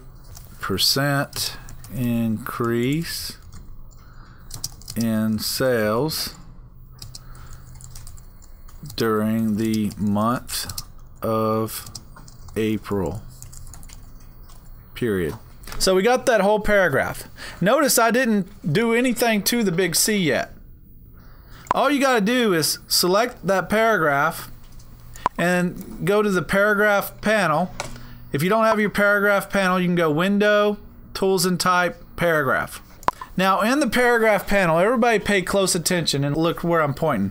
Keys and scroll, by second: 0.3-14.6 typing.